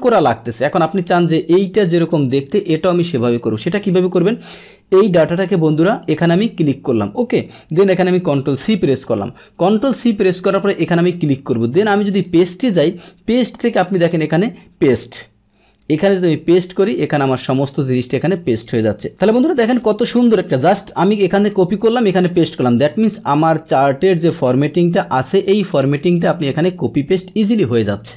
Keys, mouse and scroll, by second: 1.2 click, 2.8 click, 4.0 click, 8.3 ctrl+c, 10.3 click, 12.2 click, 16.0 click, 17.2 click, 19.1 click, 21.3 click, 22.0 click.